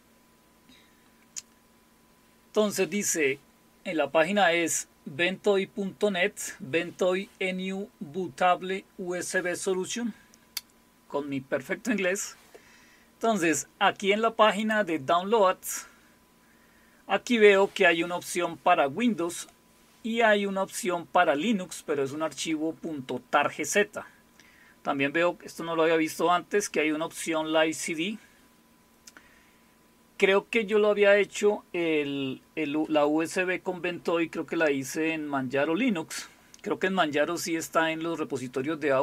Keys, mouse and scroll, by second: 14.6 click.